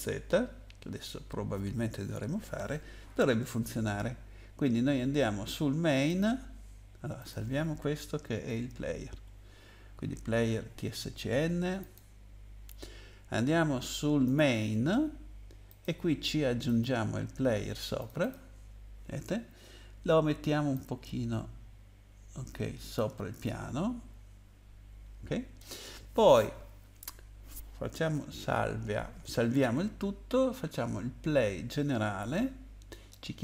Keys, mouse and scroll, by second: 6.1 click, 7.2 click, 8.5 ctrl+s, 11.8 click, 14.3 click, 15.7 click, 16.6 click, 18.0 click, 18.2 click, 18.3 double click, 20.7 click, 23.4 middle click, 28.4 ctrl+s.